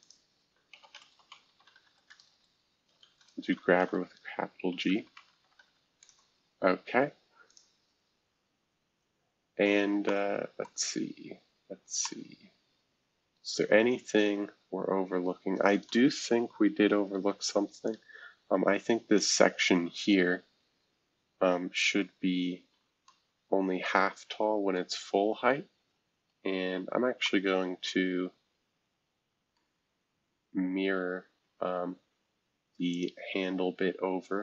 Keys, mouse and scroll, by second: 0.5-6.0 typing, 7.5-9.4 drag, 9.4 scroll down 1, 10.0-11.2 middle drag, 11.2-13.6 scroll up 2, 12.0-17.1 middle drag, 13.6-15.9 scroll up 1, 17.1 F2, 17.8-19.2 drag, 22.2 F2, 24.7-26.3 middle drag, 26.3 shift+F2, 26.8-27.2 scroll down 1, 27.2-31.0 middle drag, 31.0-32.9 scroll down 1, 32.9-34.4 drag.